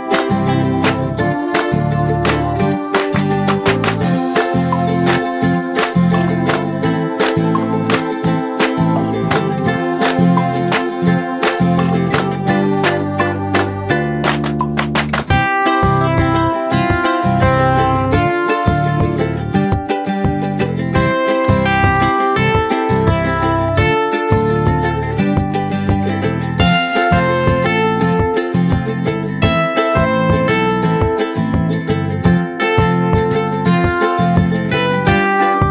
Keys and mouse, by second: 6.5 right click, 7.7-10.2 drag, 19.2 click, 22.2-24.1 drag, 27.1 right click, 28.2 click, 29.6 right click, 30.6-32.6 drag, 35.0 right click.